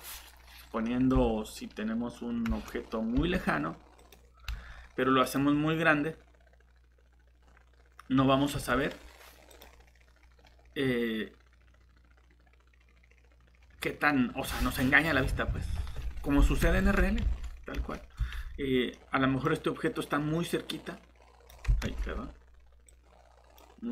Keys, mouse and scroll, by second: 3.1 shift+x, 4.0 click, 4.5 s, 8.5 g, 15.8 shift+a, 16.6 Escape, 17.4 ctrl+z, 18.9 middle click, 19.8 click, 21.8 ctrl+z, 22.1 scroll down 1, 22.9 click.